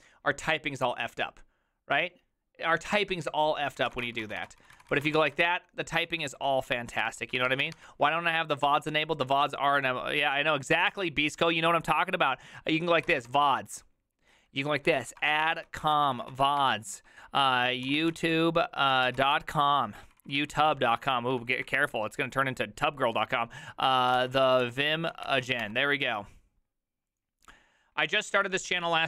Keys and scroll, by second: 3.7-8.1 typing, 9.8 typing, 15.0-22.1 typing, 23.9-26.0 typing.